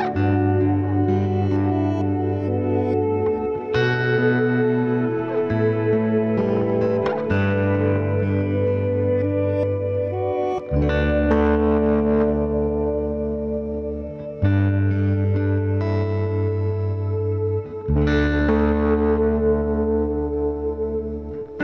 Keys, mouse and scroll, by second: 0.0 c, 0.8 middle click, 4.6 middle click, 5.2 c, 9.5 z, 9.9 middle click, 11.7 KP_3, 12.1 z, 15.0 c, 17.2-21.6 right drag, 17.6 c, 18.7 c, 20.7 ctrl+s, 21.3 KP_Decimal.